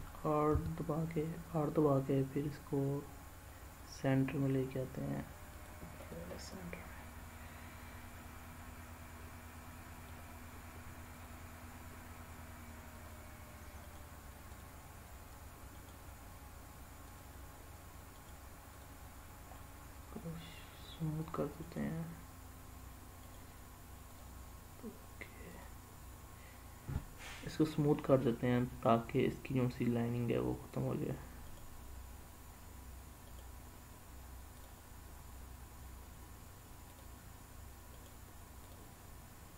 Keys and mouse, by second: 0.5 r, 5.5 click, 6.4-10.1 middle drag, 11.1 click, 12.9 click, 13.8-14.6 right drag, 15.8-16.2 right drag, 18.2 right click, 21.2 click, 21.7-22.5 right drag, 23.3-24.1 right drag, 31.5-32.1 right drag, 33.3-34.7 right drag, 37.9-38.7 right drag.